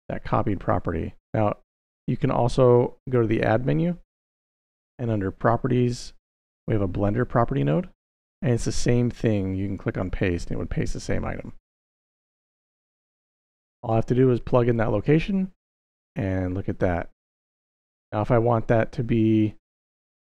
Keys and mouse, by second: 2.0 click, 2.9 shift+a, 9.5 click, 11.7 click, 12.2 x, 13.4-14.7 drag, 18.5-19.3 drag.